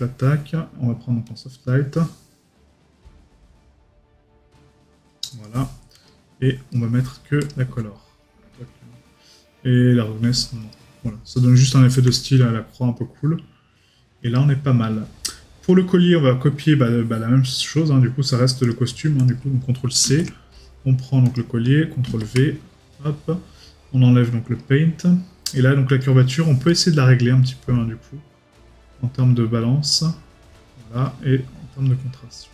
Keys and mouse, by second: 6.7 right click, 11.3 right click, 26.7 right click.